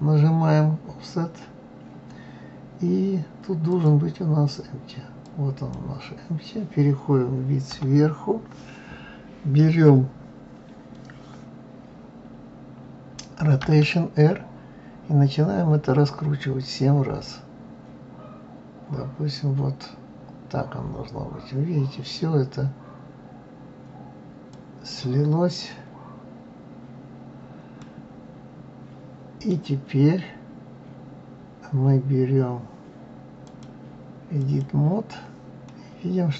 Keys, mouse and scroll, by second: 3.7-6.7 drag, 7.6 KP_7, 13.6 r, 27.8-30.8 middle drag, 33.4-35.6 drag, 35.6-36.3 middle drag.